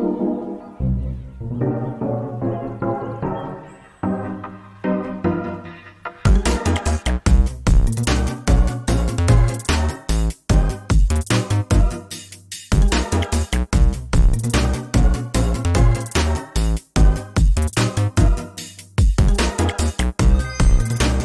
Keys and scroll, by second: 1.6 ctrl+space, 2.6 ctrl+space, 3.8 ctrl+space, 7.0 ctrl+z, 12.0 ctrl+space, 14.4 ctrl+space, 20.1 ctrl+space, 20.9 ctrl+space.